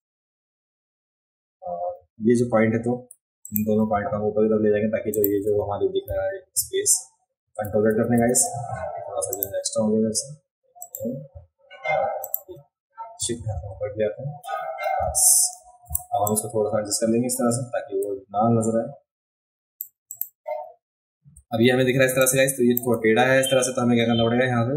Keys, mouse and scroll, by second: 0.4-1.0 alt+scroll up 2, 3.4 click, 5.1 shift+click, 7.6 ctrl+z, 7.9 ctrl+z, 8.2 ctrl+z, 9.3 click, 10.8 click, 12.2 shift+click, 15.8 v, 16.2-19.7 drag, 20.1 click, 20.5 scroll up 1, 20.7 alt+scroll down 1, 22.0 space, 22.2 click.